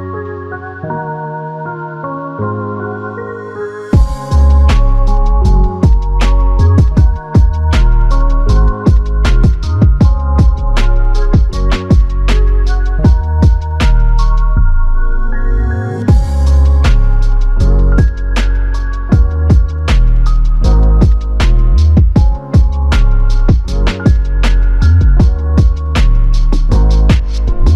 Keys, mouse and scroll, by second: 2.1 double click, 4.2 f, 10.2 double click, 12.3 alt+click, 16.0 f, 19.8 double click.